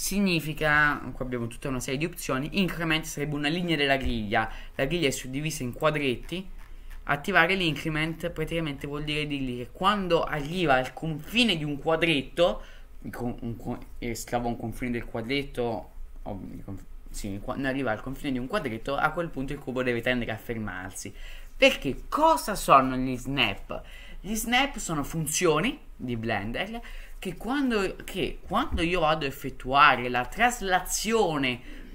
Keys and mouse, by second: 5.7 click.